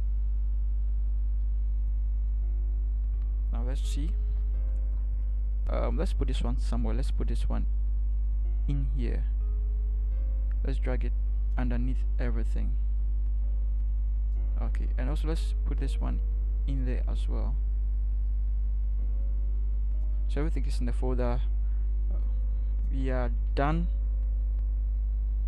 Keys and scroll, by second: 4.3 ctrl+0, 23.1 ctrl+0.